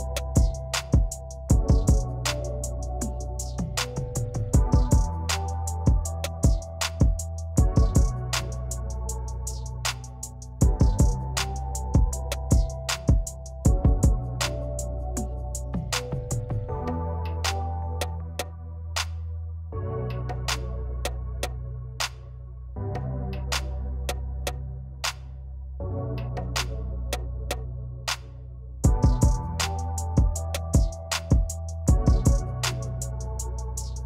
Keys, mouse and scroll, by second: 0.1 click, 1.2-3.5 shift+drag, 4.8-7.0 drag, 8.2 v, 8.6 click, 10.4 right click, 10.9 click, 11.5-12.7 ctrl+click, 13.6-14.6 shift+drag, 15.4 v, 16.3-17.4 alt+drag, 20.2 ctrl+d, 21.5 ctrl+d, 26.6 click, 29.2 click, 32.2 v, 32.4 click, 33.0 |, 33.4 click.